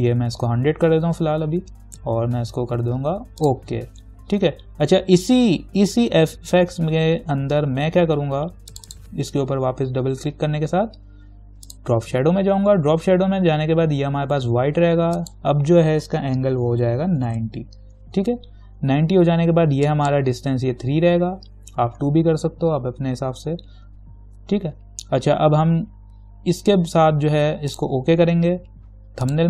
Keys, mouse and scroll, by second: 3.6 click, 8.9 click, 11.9 click, 15.4 click, 17.2-18.0 typing, 20.1 click, 22.7 2, 27.9 click.